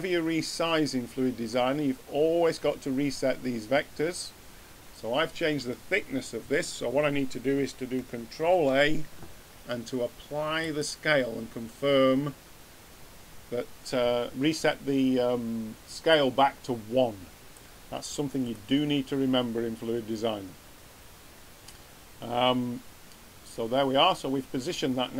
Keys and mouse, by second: 8.4 ctrl+a, 16.1-17.9 drag, 19.6 middle click.